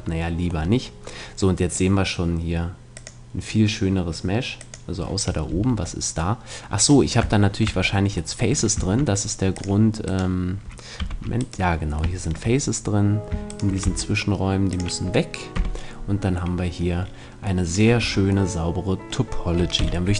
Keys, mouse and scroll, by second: 3.1-6.4 drag, 5.5 Tab, 6.4 middle click, 8.8 ctrl+Tab, 10.1-13.1 middle drag, 11.0 z, 13.5-14.8 right drag, 13.8 x, 15.5 z, 15.7-17.3 middle drag, 18.0 Tab, 19.8 t.